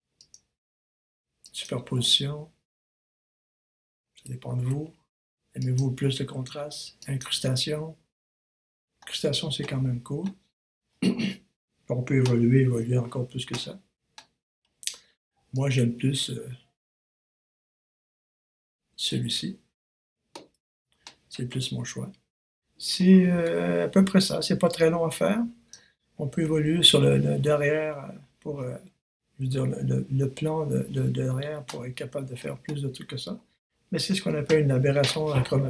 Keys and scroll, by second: 4.5 super+z, 12.7 super+s, 20.8 super+s.